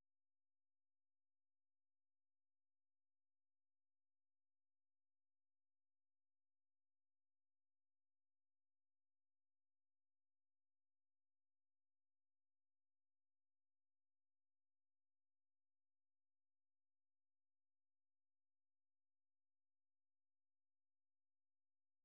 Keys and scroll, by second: 2.4 d, 8.8 d.